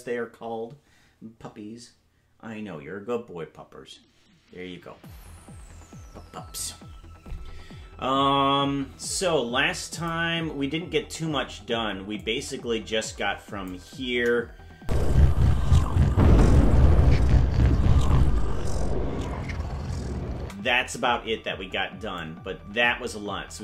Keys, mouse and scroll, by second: 9.9 click, 12.3-13.8 drag, 14.1 KP_0, 14.8 space, 20.4 space, 22.2-23.6 drag.